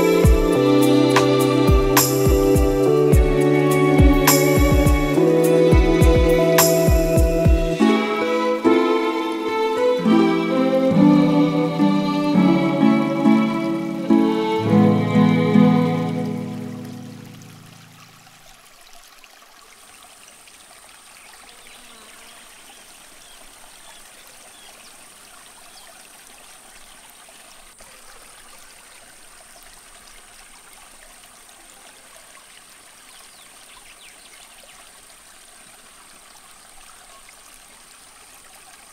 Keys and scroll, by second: 2.8 super+c, 2.9 super+v, 3.1 super+-, 3.4 shift+super+t, 6.1 Return, 6.4 Left, 6.7 Left, 8.0 e, 9.3 v, 12.3 s, 14.0 ñ, 19.5 space, 20.0 v, 20.3 v, 21.1 n, 25.2 b, 26.4 super+z, 30.7-32.7 typing, 35.9 b.